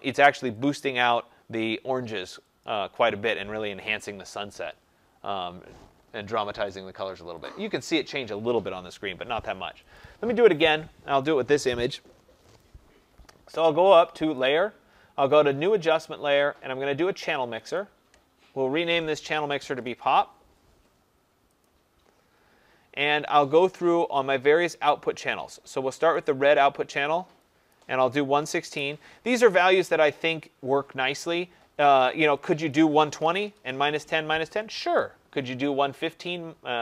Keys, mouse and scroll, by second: 0.6 click, 2.6 click, 6.6 click, 7.4 click, 9.9 click, 13.4 click, 14.3 click, 17.7 click, 19.4-20.4 typing, 21.6 click, 25.3 click, 26.1 click, 27.7 click, 28.1-29.1 typing, 32.7 click, 32.9-33.9 typing.